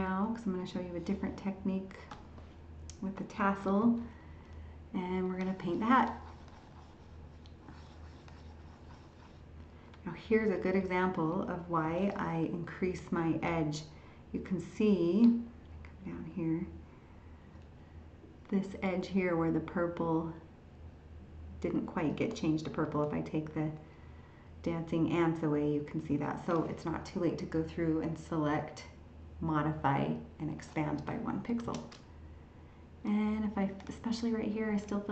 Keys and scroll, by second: 10.6 ctrl++, 22.8 ctrl+h, 26.1 ctrl+h.